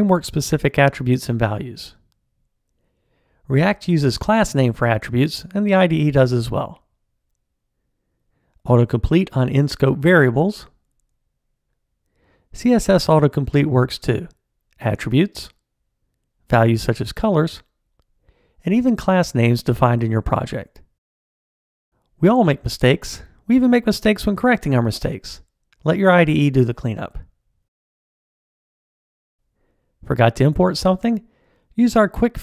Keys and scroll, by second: 5.1 Tab, 11.8 Tab, 12.9 shift+Return, 16.5 Tab, 19.5 Return, 31.0 alt+Return.